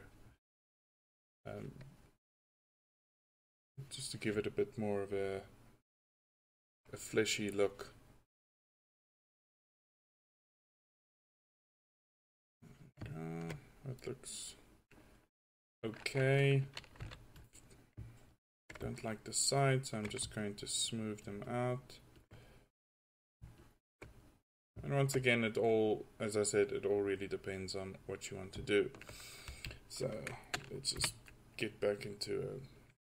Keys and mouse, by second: 0.0 click, 7.6-8.1 drag, 10.3-13.2 drag, 17.0 f, 19.0-20.4 drag, 31.0 KP_1.